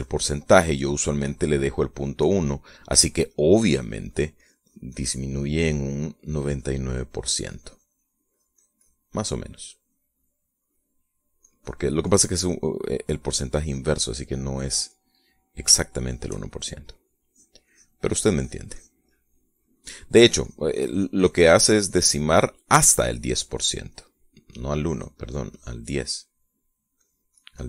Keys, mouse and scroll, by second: 3.2 middle click, 3.9 click, 6.1 middle click, 6.9-9.7 drag, 10.1 click, 10.8 middle click, 11.4 middle click, 12.1-13.3 drag, 13.4-16.3 middle drag, 16.5-17.7 shift+middle drag, 17.9 click, 18.8 click, 19.9 middle click, 20.4-22.8 drag, 22.9 middle click, 23.5-24.7 drag, 24.7 middle click, 25.6 click, 26.9 middle click.